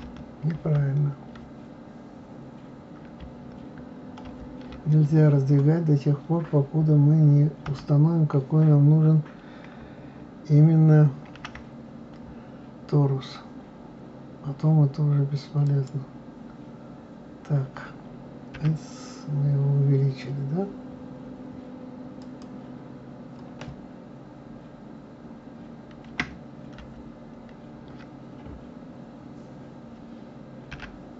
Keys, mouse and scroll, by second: 7.7 KP_7, 11.3 shift+a.